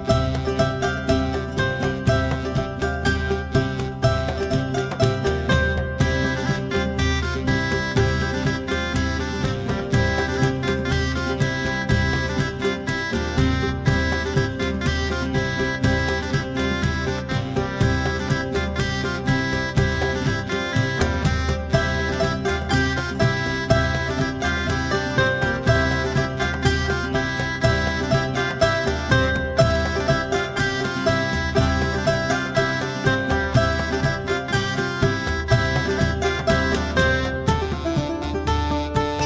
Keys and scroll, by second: 15.8 Delete, 18.8-19.9 typing, 20.0 Return.